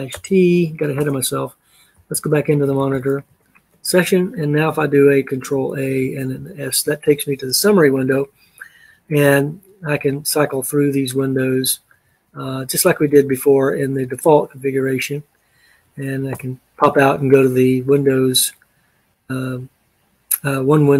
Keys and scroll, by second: 0.0-3.4 typing, 5.8 ctrl+a, 6.4 s, 9.6 Up, 10.6 Up, 11.2 Up, 12.0 Up, 12.5 Up, 12.9 Up, 13.5 Up, 13.9 Up, 16.4 Return.